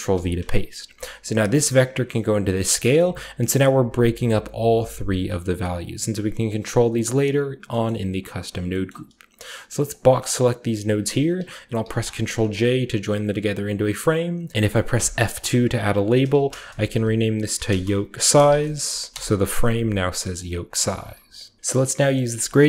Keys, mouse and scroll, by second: 0.0 ctrl+v, 1.4-2.5 drag, 2.9 click, 4.7 drag, 5.1 click, 5.7 click, 6.6 click, 7.6-9.8 scroll down 1, 7.8 middle click, 8.1 click, 8.8-10.6 middle drag, 9.8 click, 10.6 g, 10.9 click, 11.8 ctrl+j, 11.8-14.5 ctrl+drag, 12.1-14.5 scroll down 1, 12.3 a, 14.5 F2, 14.5 Escape, 14.5 y, 16.2-21.4 typing, 20.3-21.6 drag, 20.8 middle click, 20.8-21.6 scroll up 1, 21.2 middle click, 22.1-22.6 middle drag, 22.4-22.6 drag.